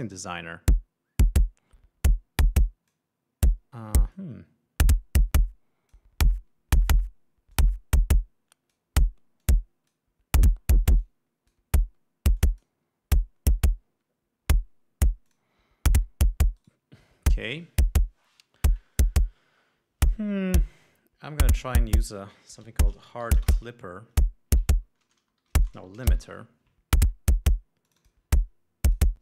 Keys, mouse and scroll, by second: 0.2-3.6 drag, 4.6-6.6 drag, 8.0-9.4 drag, 9.9-10.6 drag, 11.5-12.2 drag, 12.8-13.3 drag, 15.7 click, 17.1 right click, 22.5 click, 23.1-27.2 typing, 28.3 click.